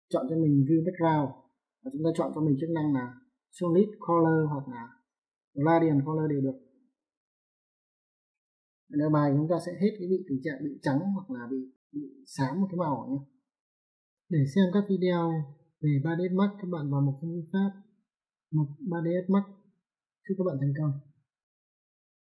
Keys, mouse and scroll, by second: 7.4 click, 9.9 alt+middle click, 11.5 alt+middle click.